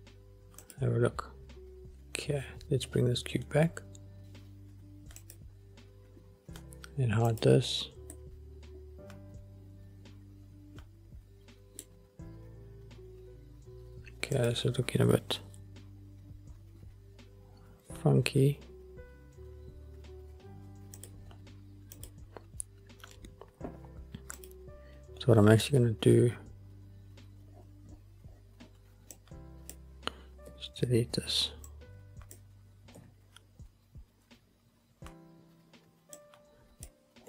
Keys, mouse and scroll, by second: 0.9 click, 3.0-3.5 scroll down 2, 3.7-4.3 scroll down 3, 4.2 scroll up 5, 5.3 click, 7.4 click, 8.2-12.2 middle drag, 12.6-13.0 scroll up 1, 14.5 click, 15.6 s, 21.1 click, 22.1 click, 24.5 click, 27.6-29.2 scroll down 7, 29.2-29.9 drag, 30.6 Delete, 31.8-32.5 drag, 33.1 Delete, 35.5-36.1 scroll down 1, 36.1 scroll down 2, 36.2-37.0 drag.